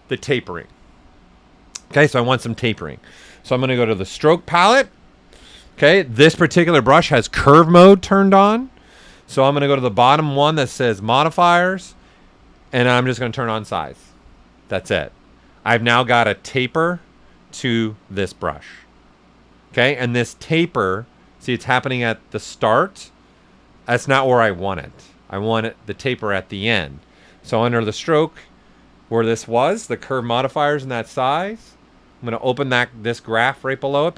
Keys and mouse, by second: 3.5 click, 9.9 click, 12.5 click, 16.3 click, 17.5-27.4 right drag, 27.4 click, 31.8 click.